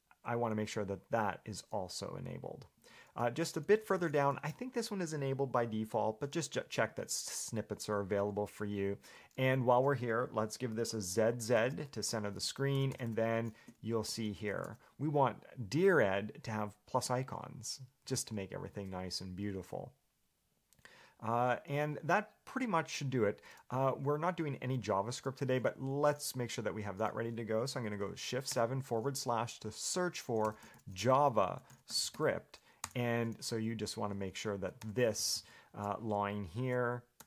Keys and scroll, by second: 3.0 Escape, 3.4-5.0 typing, 13.0 j, 13.1 j, 13.3 j, 13.9 Escape, 14.3 j, 14.7 shift+v, 21.4 Escape, 28.7 /, 30.4-32.8 typing, 33.1 Return, 34.2 Escape, 34.8-36.0 typing.